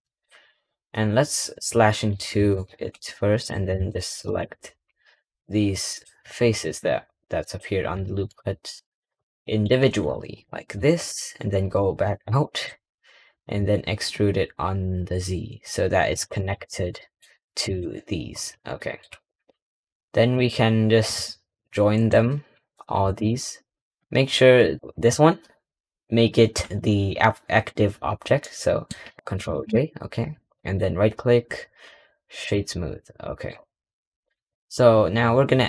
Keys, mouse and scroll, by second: 1.4 /, 2.0-2.4 scroll up 2, 2.4 1, 3.3 click, 3.6 3, 4.1 click, 5.8 shift+click, 7.3 shift+click, 8.1-11.0 middle drag, 11.0 /, 11.4-11.9 scroll down 4, 12.3 middle click, 12.6-13.2 scroll down 1, 13.2 e, 16.2 click, 16.8 middle click, 17.5 click, 18.6-19.0 middle drag, 28.3 middle click, 29.1 alt+j, 30.4-32.7 right drag, 32.7 scroll down 1, 33.5 scroll up 4, 33.7 scroll down 1, 34.0-34.6 scroll up 5.